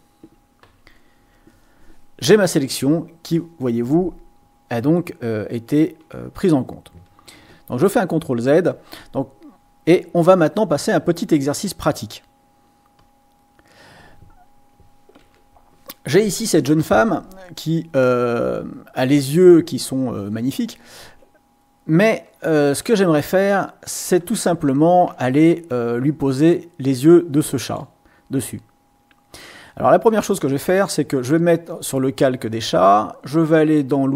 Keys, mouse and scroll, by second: 0.6 Delete, 7.3 ctrl+z, 12.9 click, 15.2 ctrl+shift+a, 22.8 click, 27.6 click, 30.5 click.